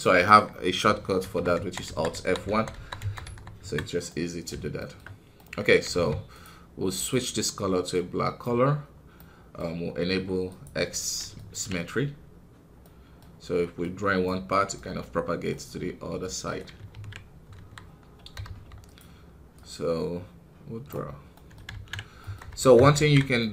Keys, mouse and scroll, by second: 1.1 alt+F1, 1.5 alt+F1, 1.8 alt+F1, 2.1 alt+F1, 2.4 alt+F1, 2.7 alt+F1, 2.9 alt+F1, 3.2 alt+F1, 4.0-5.8 middle drag, 5.8 f, 7.8 click, 11.1 middle click, 11.7-13.7 scroll up 1, 13.7 click, 14.4-16.9 middle drag, 16.9 ctrl+z, 17.5 KP_1, 17.9-18.3 scroll up 1, 18.3 f, 19.5-21.3 drag, 21.3 middle click, 21.7 ctrl+z, 22.2 middle click, 22.4 Tab, 23.3-23.5 middle drag.